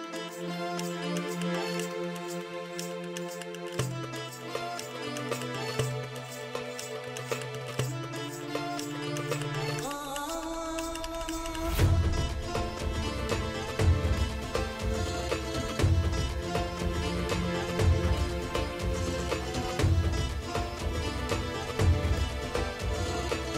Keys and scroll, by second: 0.0-0.9 typing, 2.1 space, 2.6 5, 3.5 [, 5.8 space, 10.6 space, 14.8 space, 18.5 space, 18.9 space, 20.6 space.